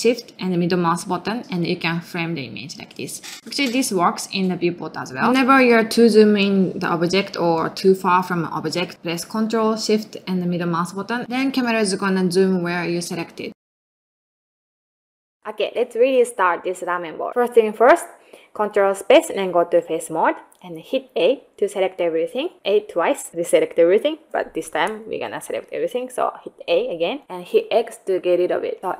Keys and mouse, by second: 1.7 ctrl+middle click, 2.5 ctrl+shift+middle click, 4.2 ctrl+middle click, 4.5 ctrl+middle click, 4.8 ctrl+middle click, 5.1 ctrl+middle click, 5.5 ctrl+middle click, 5.8 ctrl+middle click, 6.2 ctrl+middle click, 6.6 ctrl+middle click, 6.9 ctrl+middle click, 7.2 ctrl+middle click, 7.5 ctrl+middle click, 10.1 a, 10.3 ctrl+shift+middle click, 11.7 ctrl+space, 12.5 ctrl+shift+middle click, 12.9 ctrl+middle click, 13.3 ctrl+middle click.